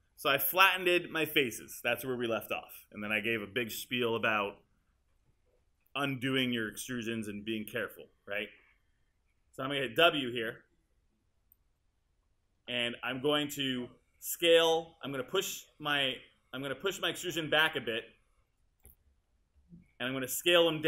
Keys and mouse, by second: 10.0 w.